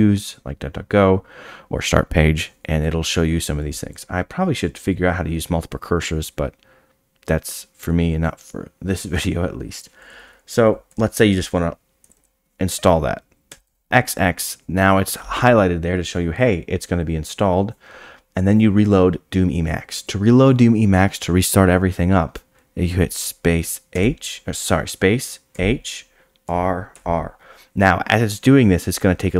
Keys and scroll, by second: 13.5 x, 13.7 x.